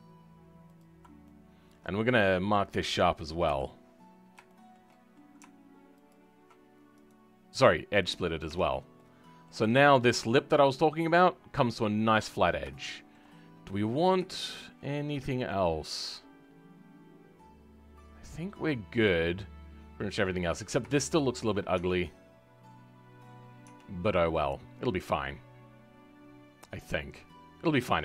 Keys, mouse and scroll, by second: 1.2-3.4 shift+middle drag, 3.4 KP_Decimal, 4.0-4.4 scroll up 2, 4.4-6.0 shift+middle drag, 6.0 alt+shift+click, 8.1 right click, 8.4 Tab, 8.6-8.9 scroll down 2, 8.9 middle click, 9.6-10.0 scroll up 2, 10.0 click, 10.3-11.4 middle drag, 11.4-11.7 scroll down 2, 11.7-13.3 middle drag, 13.3-13.6 scroll down 2, 13.6-14.8 middle drag, 14.8-15.1 scroll down 2, 15.1-18.2 middle drag, 20.2-20.9 scroll up 4, 20.9 shift+middle click, 21.7 Tab, 23.6 Tab, 23.8-24.3 scroll down 3, 24.3-27.3 middle drag.